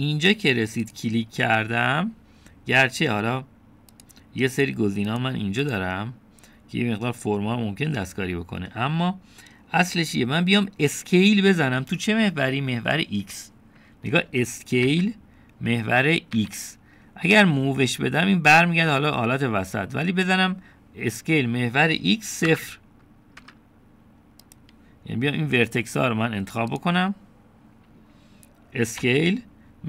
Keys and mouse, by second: 5.0 click, 5.6 click, 6.1 click, 6.7 click, 15.9 s, 21.2 right click, 22.0-23.5 drag, 23.5 KP_0, 24.4 KP_Enter, 25.6-26.2 drag.